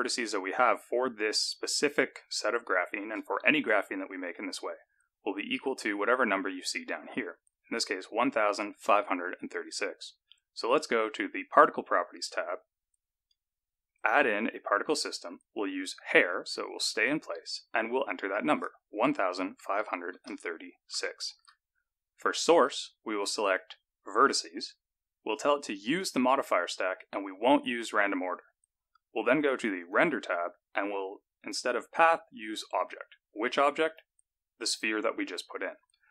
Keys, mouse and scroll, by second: 11.4 click, 13.9 click, 16.1 click, 18.4 click, 22.5 click, 23.4 click, 25.9 click, 27.5 click, 29.7 click, 31.4 click, 33.8 click.